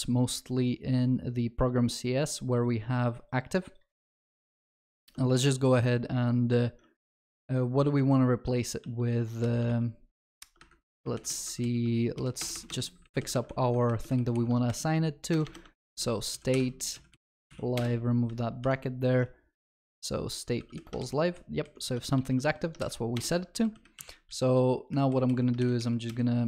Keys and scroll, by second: 4.4 ctrl+shift+Right, 7.9 ctrl+v, 8.4 ctrl+z, 9.3 ctrl+z, 13.7 ctrl+v, 21.0 ctrl+shift+Left, 22.1 ctrl+x.